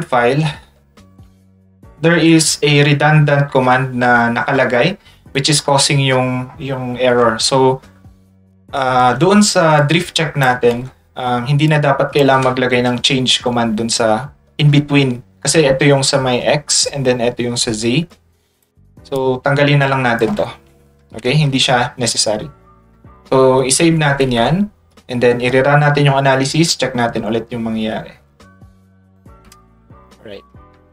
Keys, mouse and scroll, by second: 1.5 ctrl+middle click, 1.5 ctrl+scroll down 2, 1.9 middle click, 1.9-2.5 scroll up 2, 3.3 ctrl+middle click, 3.3-3.8 ctrl+scroll up 4, 3.7 middle click, 4.2 middle click, 4.2 scroll up 2, 9.8 ctrl+click, 11.7 click, 16.1 click, 18.1 click, 19.2-20.2 drag, 22.9 ctrl+s, 24.1 ctrl+s, 24.9 click.